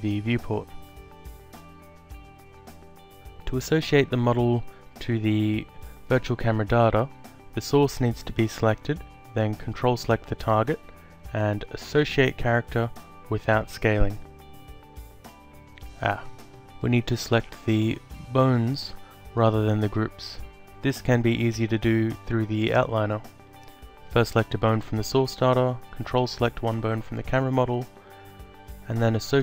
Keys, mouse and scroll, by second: 0.0 alt+click, 6.1 click, 7.8 ctrl+click, 9.6 click, 13.5 click, 14.9 click, 16.1 alt+middle click, 17.4 click, 20.0 click, 24.2 ctrl+click, 28.1 click.